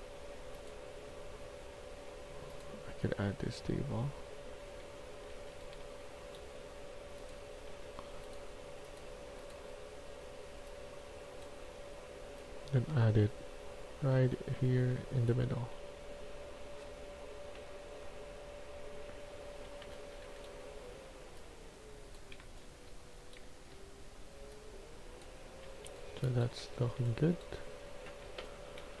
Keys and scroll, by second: 4.9-6.1 typing, 7.6 s, 12.1 s, 14.0 w, 15.6 s, 19.5-20.3 typing, 22.1-23.3 typing, 25.1-29.0 typing.